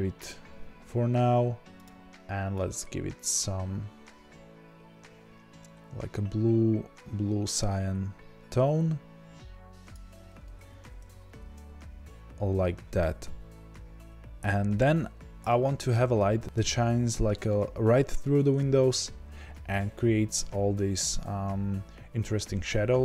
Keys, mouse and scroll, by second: 11.8-14.4 scroll up 1, 15.4-23.0 middle drag, 16.4-19.5 scroll up 1.